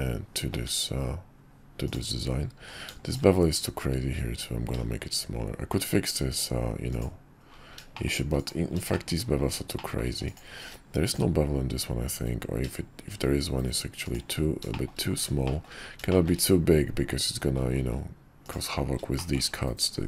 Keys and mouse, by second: 1.0 `, 1.8 middle click, 2.6 q, 7.9 shift+middle click, 8.3 click, 8.9 shift+middle drag, 9.7 shift+middle drag, 10.6 q, 14.7 shift+middle drag, 15.4 shift+middle drag, 16.1 shift+middle click, 18.4 click, 19.2-20.0 shift+middle drag.